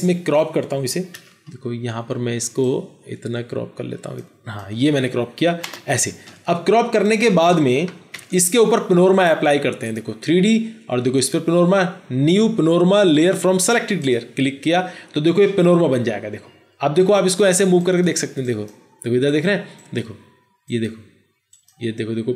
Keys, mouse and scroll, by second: 0.5 c, 5.6 Return, 8.1 ctrl+0.